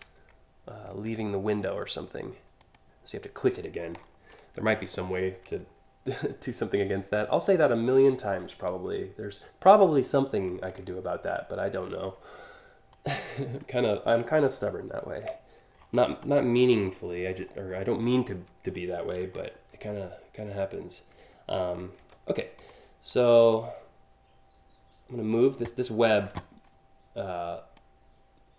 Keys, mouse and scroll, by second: 0.7 ctrl+click, 2.2 click, 3.6 scroll down 1, 4.2 scroll down 1, 5.2 alt+scroll up 1, 5.7-6.2 alt+scroll up 3, 9.6 a, 10.3 click, 11.5-12.5 drag, 14.8 ctrl+x, 15.4-16.5 scroll up 6, 16.1 x, 17.0 scroll up 1, 17.4 scroll down 4, 17.6-19.1 scroll up 5, 17.6 x, 22.2 click, 22.7 click, 23.1 click, 27.3-28.5 drag.